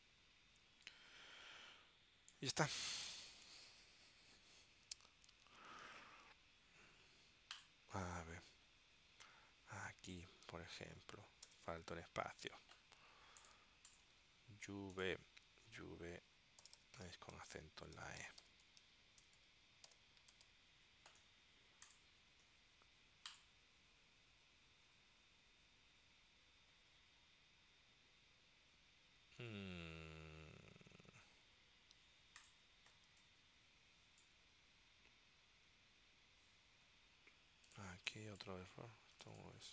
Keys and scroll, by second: 11.6 space, 15.6 super+f, 16.5-21.1 typing, 33.2 space, 38.0 space.